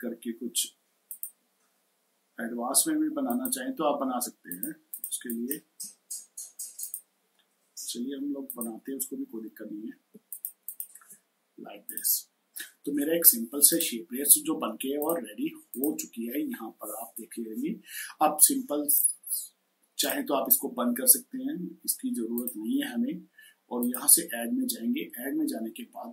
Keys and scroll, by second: 10.0 space.